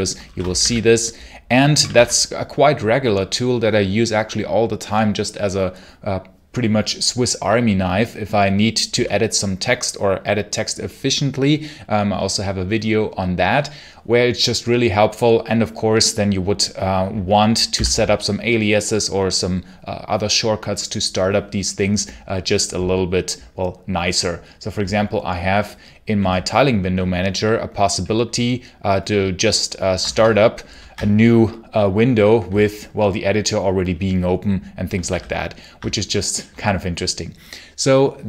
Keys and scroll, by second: 0.0-1.7 typing, 1.8 Return, 17.6 v, 17.7 space, 30.0 shift+super+Return, 34.9 ctrl+q.